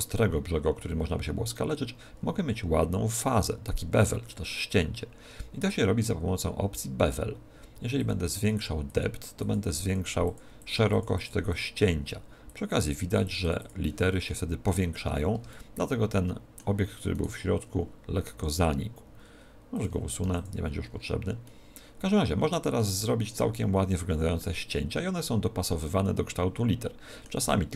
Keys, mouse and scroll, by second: 7.9 click, 8.3 click, 10.2 click, 10.9 click, 11.5 click, 12.4 click, 12.9 click, 13.0 click, 13.2 click, 13.4 click, 13.6 click, 14.2 middle click, 14.8-15.3 scroll down 8, 15.5 shift+middle click, 16.1 middle click, 17.1 right click, 18.3 s, 19.7 click, 20.1 x, 20.8-21.4 scroll up 4, 21.4 middle click, 24.3 middle click.